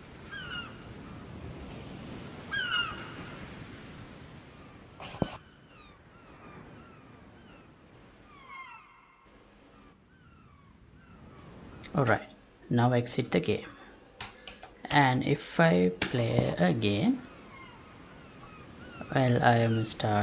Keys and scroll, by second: 12.0 Escape, 14.4 F11, 16.0 alt+p.